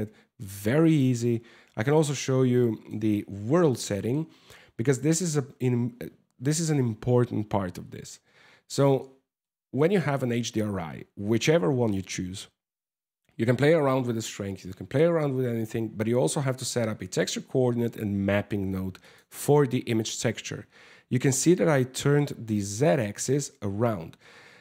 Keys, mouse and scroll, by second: 0.4 click, 2.2 middle click, 2.7-3.3 scroll down 9, 3.3 middle click, 3.9 scroll up 6, 8.2 click, 8.5 middle click, 16.0 click, 17.4 click, 18.6 click, 21.0 click.